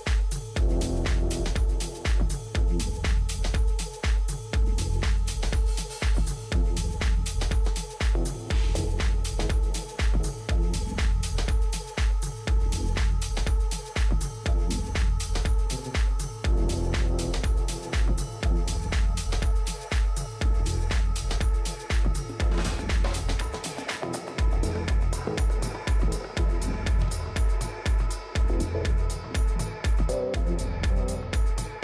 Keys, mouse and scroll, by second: 1.0 g, 3.2 a, 4.5-6.4 right drag, 5.7 g, 7.8 a, 8.2 middle click, 11.0 KP_7, 11.7 a, 12.1 a, 15.3 b, 18.4-20.4 drag, 20.9 ctrl+z, 21.5-23.7 typing, 25.9-27.8 drag, 28.6 a, 29.4-31.3 middle drag, 30.4 a, 30.7 a.